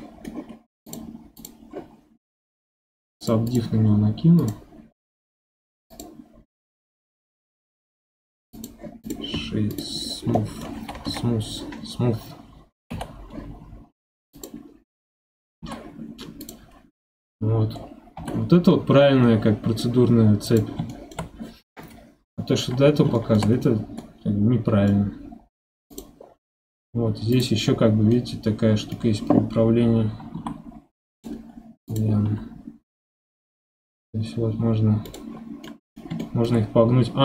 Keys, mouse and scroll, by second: 0.5-0.9 scroll up 3, 0.9 drag, 1.4 click, 2.5 scroll up 1, 3.2 click, 3.5-7.5 drag, 7.5 right click, 9.0 click, 9.7 click, 10.0-10.3 scroll down 5, 10.3-11.0 middle drag, 11.0 KP_1, 12.9 g, 15.6 g, 16.7 scroll up 1, 17.8 scroll down 4, 18.2 g, 20.9-22.0 shift+middle drag, 22.0-22.4 scroll up 5, 22.4-22.8 middle drag, 22.8 scroll up 1, 23.1-23.5 shift+middle drag, 23.5 scroll up 4, 24.0-25.9 middle drag, 25.9 click, 26.2-27.3 scroll down 6, 27.3 click, 27.7-28.1 scroll down 2, 28.1-30.3 middle drag, 30.3 r, 31.9 click, 32.2 r, 35.7-37.2 middle drag.